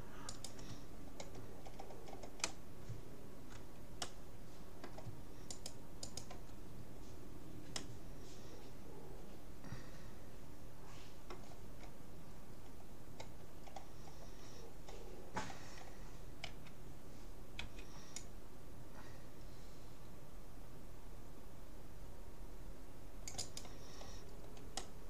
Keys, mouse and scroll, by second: 0.3-1.7 right drag, 0.9 middle click, 1.7-5.5 middle drag, 1.7-2.1 scroll down 1, 2.1-2.5 scroll up 1, 2.5 scroll down 1, 2.7 scroll up 1, 5.5 click, 5.5-7.7 right drag, 6.8-9.6 middle drag, 12.5 scroll up 1, 14.7-17.7 middle drag, 16.5 a, 17.7 c, 24.1 middle click, 24.9-25.0 middle drag.